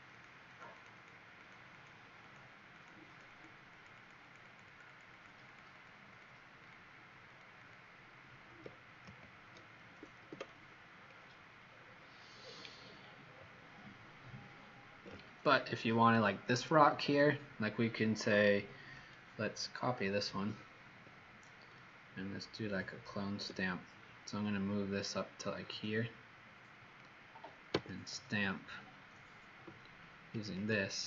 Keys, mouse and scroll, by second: 0.1 click, 0.5 click, 0.7 click, 0.9 click, 1.5 click, 1.8 click, 2.4 click, 2.9 click, 3.2 click, 3.5 click, 3.9 click, 4.1 click, 4.5 click, 4.9 click, 5.0 click, 5.3 click, 5.5 click, 5.8 click, 6.1 click, 6.8 click, 7.5 click, 9.0 alt+Delete, 10.1 ctrl+d, 10.9-12.7 alt+scroll down 10, 12.7 alt+scroll down 1, 18.1 click, 20.2 ctrl+j, 23.4 v, 24.4 click, 27.7 s, 30.4 alt+click.